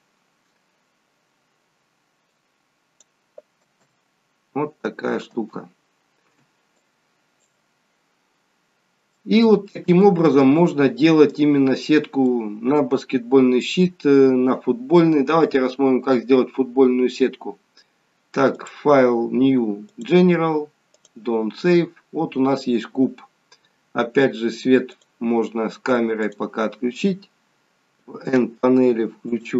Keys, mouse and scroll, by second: 2.2 click, 3.5 space, 5.3 space, 6.7 click, 9.6 middle click, 9.6 scroll down 1, 10.3 scroll down 2, 12.2 scroll down 1, 12.3 middle click, 18.6 click.